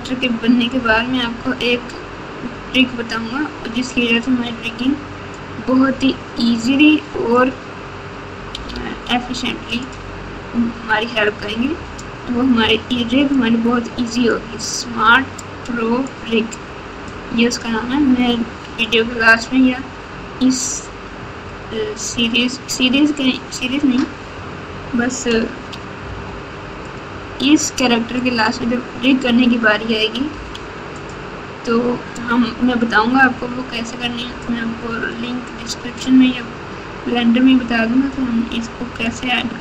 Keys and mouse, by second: 4.4 click, 6.7 click, 8.6 f, 11.2 click, 13.3 click, 15.5 click, 17.0 click, 18.8 click, 21.5 click, 26.0 f, 28.1 right click, 30.3 f, 32.1 click, 34.4 click, 39.0 click.